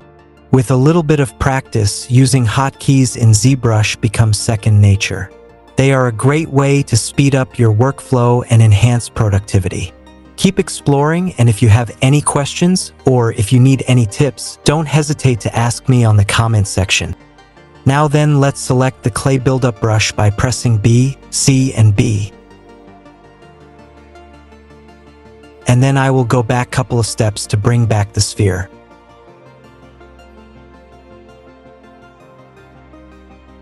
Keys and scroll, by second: 19.4 c.